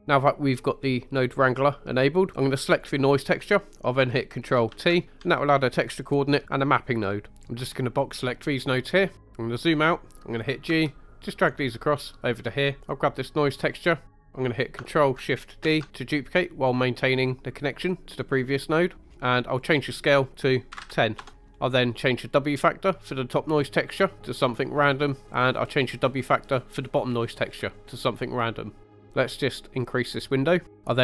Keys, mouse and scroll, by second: 2.7 click, 4.7 ctrl+t, 5.0 middle click, 7.4 click, 7.6-8.7 drag, 9.1-10.3 scroll down 2, 10.7 g, 12.0 click, 12.8-14.3 drag, 14.3 ctrl+z, 15.7 ctrl+shift+d, 18.2 click, 19.0 middle click, 19.1 scroll up 2, 19.6-21.2 drag, 21.3 middle click, 21.5 scroll down 1, 23.0-24.4 drag, 25.0 middle click, 26.2-28.2 drag, 28.9 middle click, 29.7 click, 30.7 middle click.